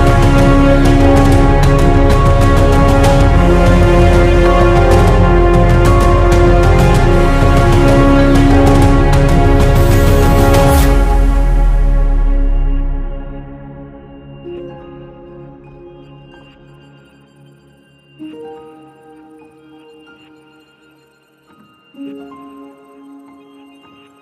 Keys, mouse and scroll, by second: 0.7 click, 2.0 ctrl+scroll up 1, 5.5 right click, 7.1 click, 9.1 ctrl+z, 11.1 ctrl+z, 13.3 click, 15.4-23.4 ctrl+drag.